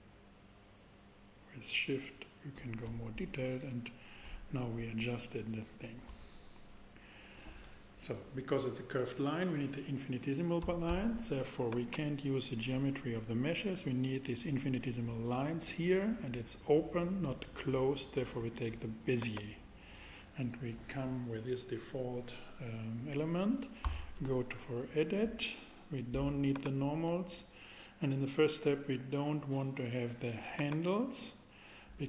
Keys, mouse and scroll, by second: 10.9 shift+a, 23.8 Tab, 24.8 Tab, 26.5-28.1 drag, 30.5 click.